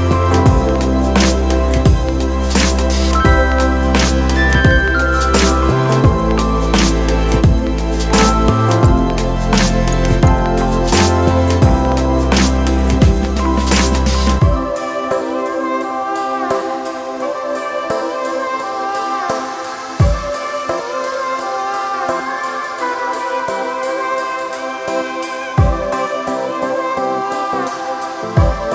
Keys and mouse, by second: 4.2 shift+click, 14.7-21.7 shift+drag, 25.3-28.7 alt+drag.